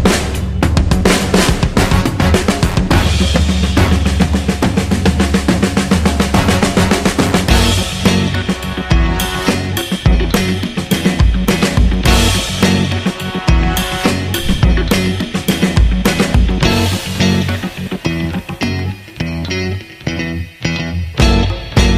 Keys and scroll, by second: 19.2 space.